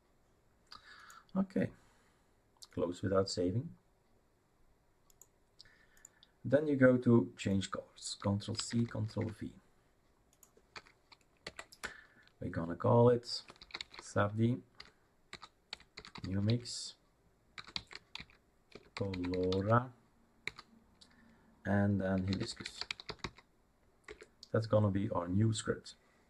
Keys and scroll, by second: 8.6 ctrl+c, 9.0 ctrl+v, 10.7 F2, 11.4 Right, 11.8-20.4 typing, 21.9-23.7 typing, 24.1 Return, 25.1 typing.